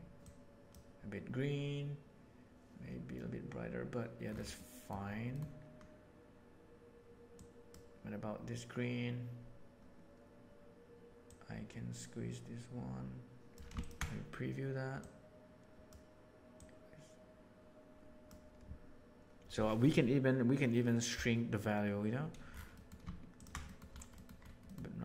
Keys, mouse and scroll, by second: 4.5 middle click, 5.2 middle click, 7.3-7.6 drag, 11.2-13.5 drag, 15.0 click, 16.5-18.3 drag, 22.8 middle drag, 23.3 ctrl+shift+click, 23.7 middle click.